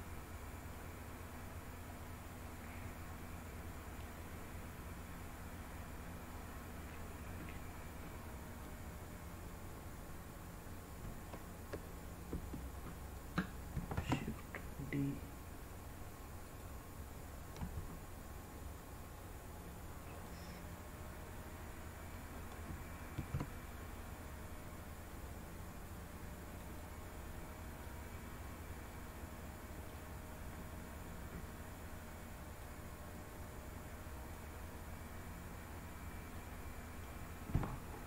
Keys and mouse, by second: 13.6 shift+d, 16.4 click, 17.5 s, 20.0 click, 20.8-22.1 middle drag, 23.1 e, 26.5 click, 27.9-29.9 drag, 27.9-29.9 right drag, 32.6-34.2 drag, 36.2 click, 36.2 right click.